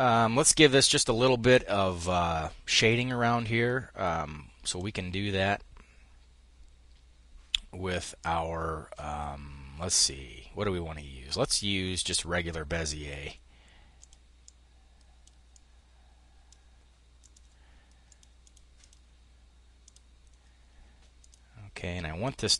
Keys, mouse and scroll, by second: 4.1 click, 13.4-17.1 drag, 17.5-19.0 drag, 19.2-21.0 drag.